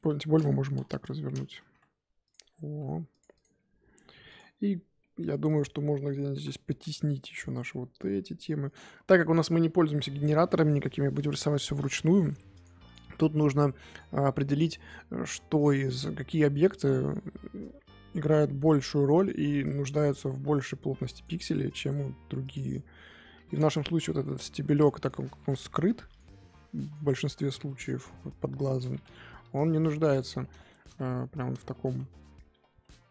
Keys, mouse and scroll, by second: 0.0 r, 1.6 s, 2.3 g, 3.4 click, 6.3 l, 7.3 g, 9.1 click, 11.4 l, 11.7 g, 12.9 Left, 14.5 l, 15.1 g, 16.0 g, 17.7 s, 19.9 g, 22.5 Left, 23.3 l, 24.5 g, 25.2 s, 26.3 g, 27.2 Left, 27.9 l, 30.8 ctrl+z, 31.8 ctrl+shift+z.